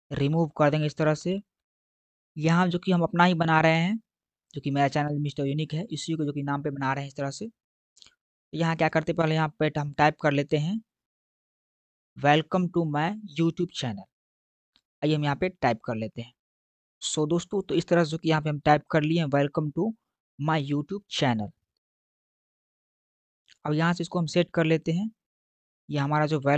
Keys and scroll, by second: 16.5 w.